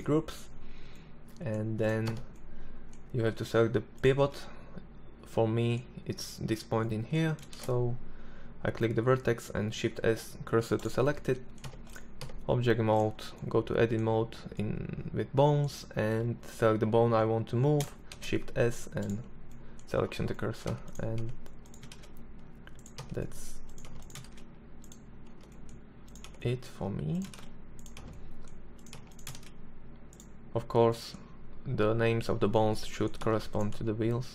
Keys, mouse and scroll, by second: 0.0-0.9 drag, 0.9 right click, 1.1 Tab, 6.5 shift+s, 10.6 Tab, 11.2 Tab, 17.1 shift+s, 19.6 Tab, 20.2 Tab, 20.9 shift+s, 21.9 Tab, 22.8 Tab, 23.2 shift+s, 24.3 Tab, 25.2 Tab, 26.3 shift+s, 26.9 Tab, 27.9 Tab, 28.3 shift+s, 32.2 Tab, 32.7 Tab, 33.5 shift+s.